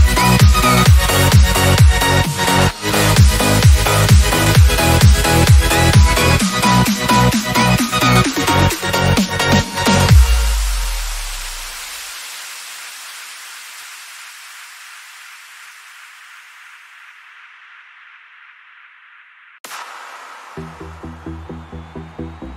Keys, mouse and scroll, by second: 1.1 click, 4.9-7.4 drag, 4.9-5.6 typing, 11.0 click, 21.3 click.